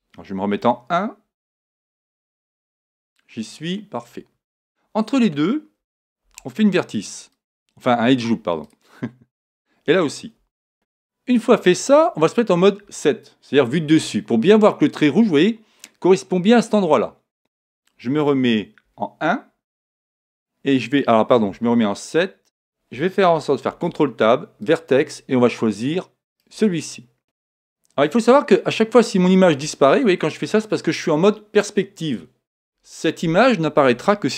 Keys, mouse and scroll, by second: 0.6-1.5 scroll up 1, 0.6 KP_1, 1.7 middle click, 1.8-3.4 scroll down 2, 1.9 middle click, 3.4-3.8 scroll up 1, 6.2 ctrl+r, 7.5-10.5 drag, 12.8 KP_7, 18.8 KP_1, 21.5 KP_7, 23.7 ctrl+Tab, 26.3 right click, 28.8-31.2 middle drag.